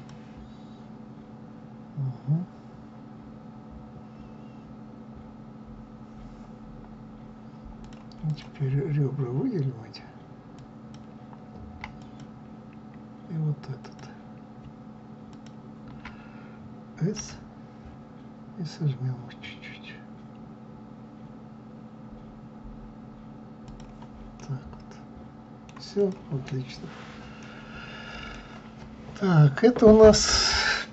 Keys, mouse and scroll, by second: 7.7 click, 8.2 click, 10.4 click, 10.8-12.1 drag, 13.7 alt+click, 15.2 alt+shift+click, 17.1 s, 24.2-25.9 middle drag, 25.9 click, 26.4-27.3 scroll down 3, 27.3-30.9 middle drag.